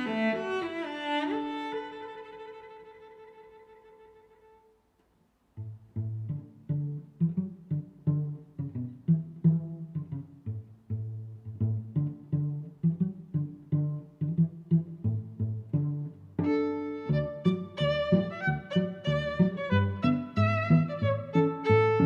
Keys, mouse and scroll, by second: 0.3 click, 5.3 click, 5.9 click, 6.8 s, 6.9 z, 8.9 click, 9.4 middle click, 9.9 middle click, 10.7 click, 11.5 shift+s, 11.6 z, 13.0 click, 13.3 click, 14.1 click, 14.4 click, 14.9 click, 15.5 click, 15.9 click, 16.4 click, 18.3 x, 18.9 click, 19.4 middle click, 20.8 click, 21.7 click.